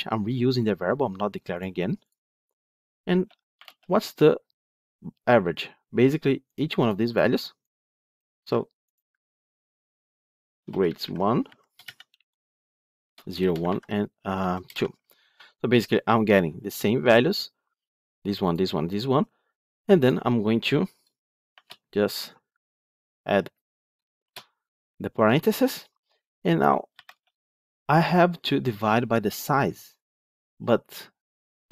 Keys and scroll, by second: 8.2 ctrl+c, 9.1 ctrl+v.